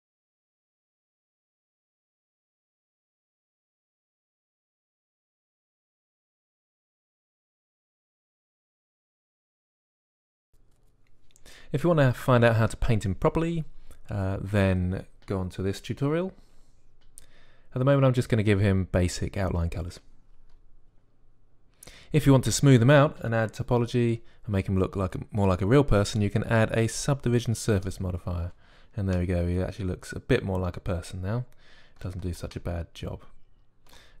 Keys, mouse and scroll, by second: 0.4 KP_1, 2.1 click, 2.1-4.3 typing, 2.7 click, 5.5 click, 5.7 alt+shift+s, 6.1 click, 6.3 g, 6.5 click, 6.5 g, 6.9 middle click, 7.3 click, 7.6 KP_1, 7.7 KP_1, 7.8 KP_5, 8.1 Tab, 9.1 shift+a, 9.4 s, 9.9 s, 10.1 click, 26.0-27.8 drag, 29.0-30.5 drag, 30.5 middle click.